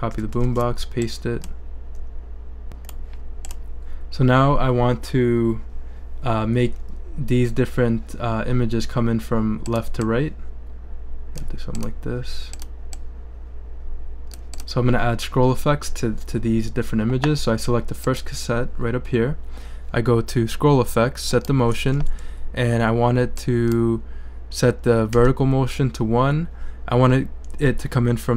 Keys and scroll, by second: 0.2 super+c, 0.4 super+v, 25.1 i.